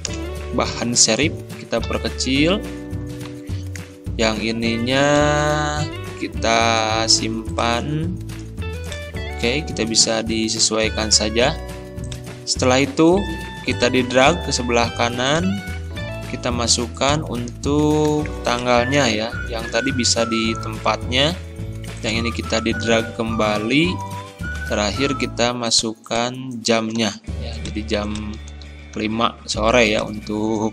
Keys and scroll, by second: 1.9 ctrl+[, 9.5 ctrl+a, 10.4 ctrl+], 18.1 ctrl+c, 19.0 ctrl+a, 19.7 ctrl+v, 27.0 ctrl+c, 28.5 ctrl+a.